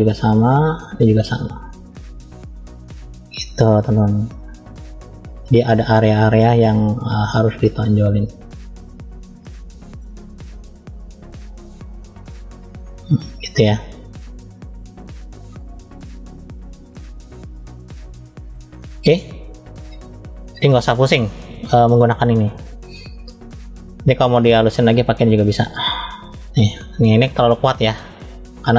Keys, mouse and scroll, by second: 0.9 click, 1.7 click, 2.4 click, 2.8 click, 3.4 click, 3.6 click, 3.8 click, 4.1 click, 5.9-6.9 drag, 9.2 ctrl+click, 10.5-10.8 scroll up 2, 11.1 click, 13.0 click, 14.3-14.6 scroll down 1, 14.8 middle click, 16.0 click, 17.1 click, 18.4 click, 22.4 click, 23.9-25.1 drag, 25.6 click, 27.3-27.9 drag.